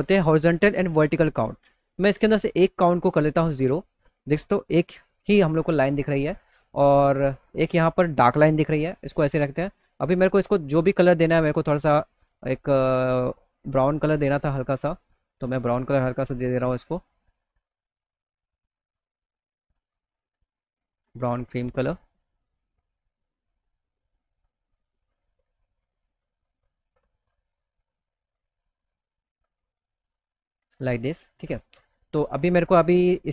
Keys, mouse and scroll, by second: 2.4 click, 6.3 click, 8.7 click, 10.5 click, 11.3-13.0 drag, 13.6 click, 13.6 right click, 16.6-18.8 drag, 19.7 click, 19.7 right click, 21.3 click, 21.3 right click, 23.5-24.9 drag, 23.5 right click, 24.9-25.9 middle drag, 28.6 middle click, 30.2 click.